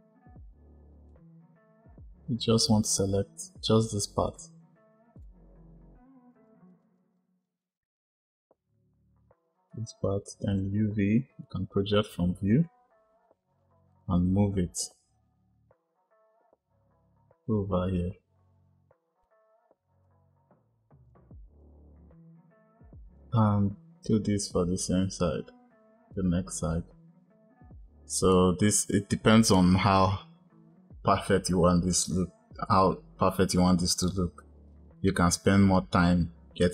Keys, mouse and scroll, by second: 0.9 click, 4.2 shift+click, 5.1 shift+click, 6.3 shift+click, 6.4 shift+click, 6.6 shift+click, 6.8 shift+click, 6.9 shift+click, 7.1 shift+click, 7.4 shift+Left, 7.6 shift+Left, 7.9 shift+Left, 12.5-14.5 drag, 21.0 click, 21.6 click.